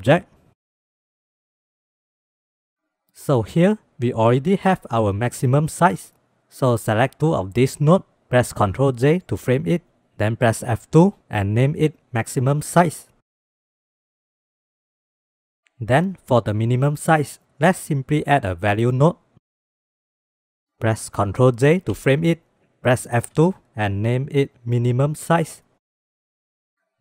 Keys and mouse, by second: 1.5 click, 2.7 click, 3.0-7.4 drag, 8.6 ctrl+j, 10.3 F2, 13.9 n, 14.3 click, 14.7 click, 16.0 shift+a, 21.6 ctrl+j, 23.0 F2.